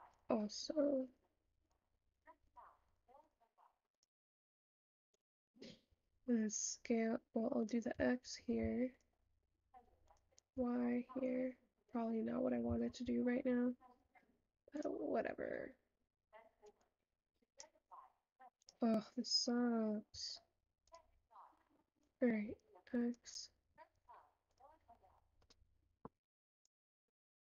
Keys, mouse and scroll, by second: 0.3 shift+click, 1.1-17.8 shift+drag, 21.0 shift+click.